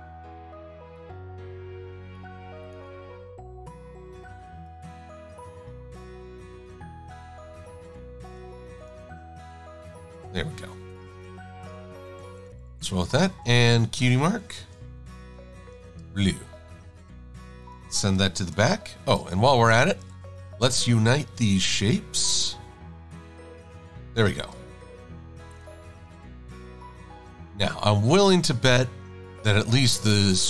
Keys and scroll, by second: 12.0 super+-, 12.2 super+-, 12.4 super+-, 12.6 super+-, 15.9 shift+super+a, 18.6 shift+super+[, 19.1 shift+super+a, 24.4 shift+super+a.